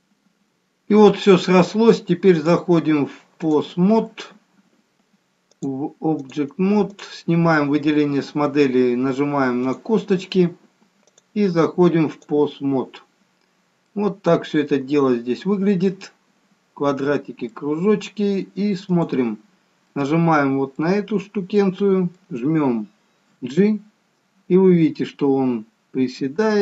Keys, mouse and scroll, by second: 2.6 click, 7.2 click, 11.3 click, 13.7-14.1 scroll up 1, 14.1 middle click, 19.2 click, 20.2 middle click, 21.2-21.9 scroll down 3, 21.9 middle click, 23.7 g.